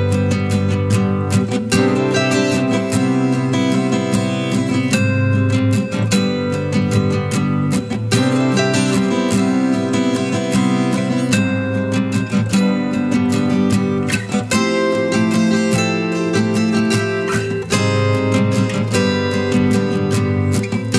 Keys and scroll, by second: 3.3 ctrl+z, 6.3 ctrl+z, 7.5-8.0 ctrl+z, 18.2 ctrl+z.